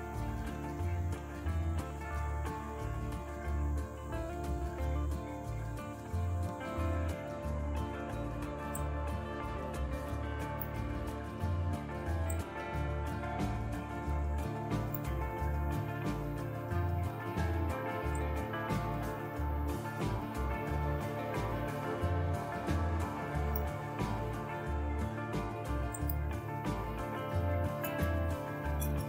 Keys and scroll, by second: 27.6-29.0 typing.